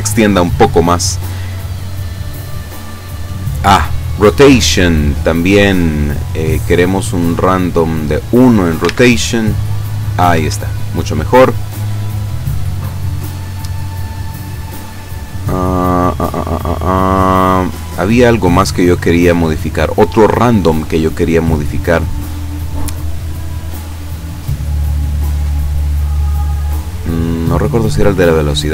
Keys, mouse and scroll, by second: 1.5-2.8 scroll down 4, 3.8 click, 4.2 click, 7.3 click, 9.3 alt+a, 10.4 Escape, 12.5 click, 14.7-16.5 scroll up 6, 17.7-18.5 scroll down 3, 19.0-19.4 scroll down 2, 20.8-21.1 scroll down 2, 22.7 scroll up 2, 24.5-25.2 scroll up 2, 26.3-26.7 scroll up 2, 27.8 scroll up 2, 28.5 click.